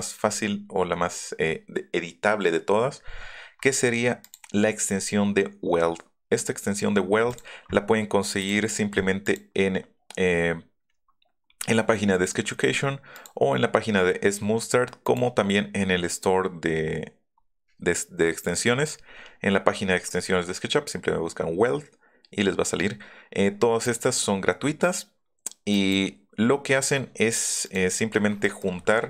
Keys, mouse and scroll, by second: 4.2 click, 4.7 [, 7.3 click, 8.4 click, 9.3 middle click, 13.1 middle click, 15.0 scroll up 1, 23.8 scroll down 2, 25.7 scroll up 2, 27.6 click, 28.4 click.